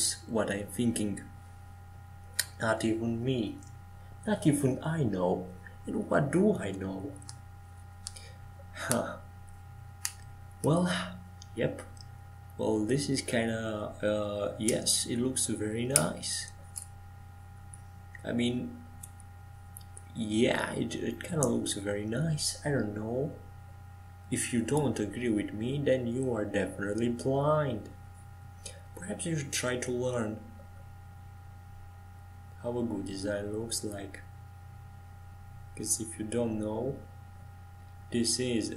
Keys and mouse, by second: 3.0-4.6 middle drag, 4.0-6.6 drag, 6.7-9.8 right drag, 9.8 middle click, 10.4 middle click, 14.8-18.3 middle drag, 18.3-25.5 right drag, 25.5 ctrl+j, 27.9 click, 30.5-33.2 middle drag, 33.2-38.7 right drag.